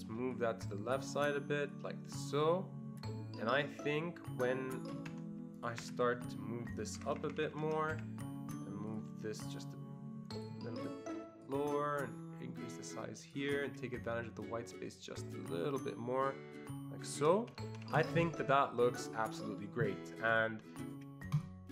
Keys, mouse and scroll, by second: 0.6-1.9 shift+drag, 2.5-5.8 shift+drag, 5.1 Escape, 5.8 Escape, 7.0 ctrl+Up, 7.1 ctrl+Up, 7.2 ctrl+Up, 7.4 ctrl+Up, 7.5 ctrl+Up, 8.0 Escape, 9.0 click, 9.5-17.9 shift+drag, 17.5 Escape, 17.7 Escape, 17.9 Escape, 18.0 click, 18.5 ctrl+scroll down 2, 18.8-19.4 ctrl+scroll up 1, 20.3 click, 21.4 click.